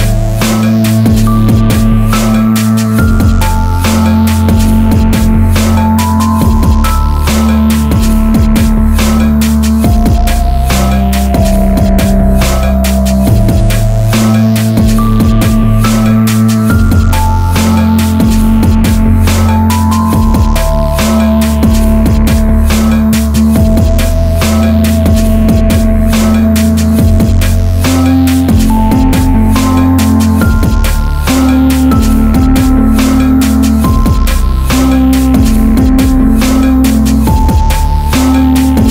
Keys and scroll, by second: 0.6 ctrl++, 8.9 Tab, 26.1 ctrl+a, 37.3 Tab.